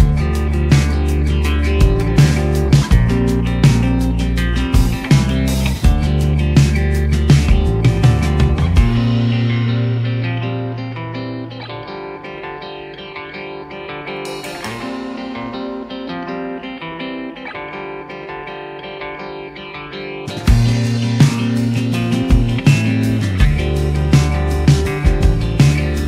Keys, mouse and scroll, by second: 0.5 click, 1.0 KP_1, 1.1 middle drag, 1.5 shift+middle click, 1.9 click, 2.3-3.0 drag, 3.3-3.8 drag, 4.3 click, 5.3 click, 6.4-6.8 drag, 9.1-9.5 drag, 9.6 click, 10.0 click, 10.5 click, 13.5 middle click, 13.9-14.6 drag, 15.2 s, 16.3 click, 16.8 r, 18.5-21.8 typing, 22.4 ctrl+alt+KP_0, 23.1 click, 23.4 click, 23.9-25.0 drag, 25.2 click.